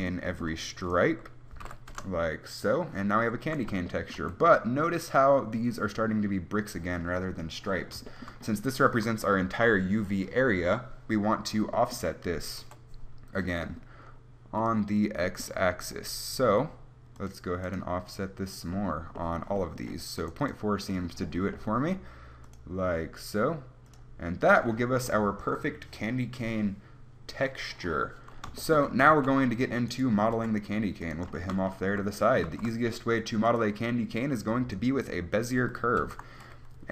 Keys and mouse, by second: 0.5-7.1 right drag, 12.9 KP_1, 21.8-27.1 drag, 29.1 z, 29.4 z, 30.5 g, 32.7 shift+a, 36.3 alt+r.